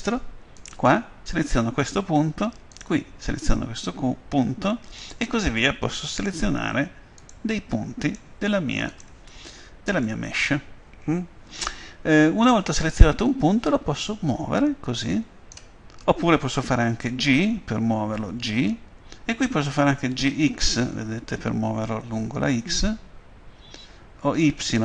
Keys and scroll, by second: 18.4 g, 20.3 x, 24.4 y.